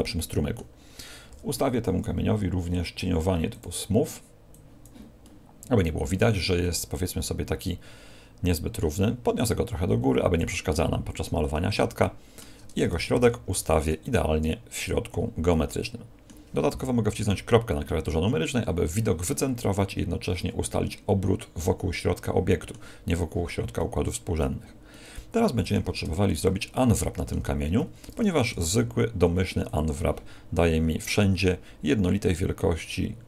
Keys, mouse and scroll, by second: 1.2 t, 2.4-3.0 scroll down 5, 3.5 click, 4.4 click, 4.6 click, 5.2 middle click, 9.3 click, 10.7 middle click, 12.0 shift+middle click, 13.1 ctrl+alt+shift+c, 15.4 middle click, 17.1 KP_Decimal, 20.6 middle click, 23.7 middle click, 24.8 middle click, 26.0 Tab, 26.7 middle click, 27.4 a, 27.6 a, 28.5 u.